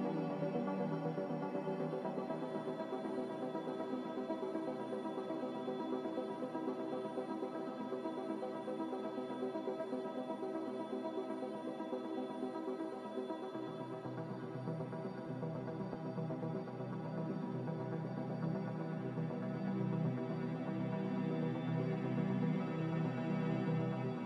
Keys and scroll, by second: 0.6 z, 3.3-4.9 typing, 23.1 n.